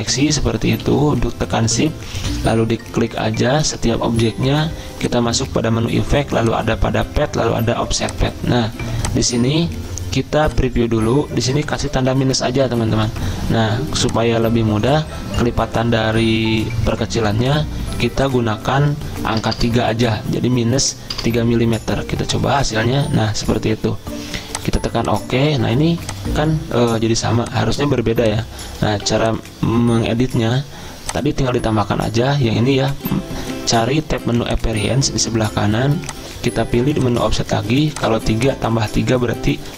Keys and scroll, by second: 0.8 ctrl+z, 19.4 BackSpace, 19.5 BackSpace, 21.1 BackSpace, 27.2 z, 28.9 v.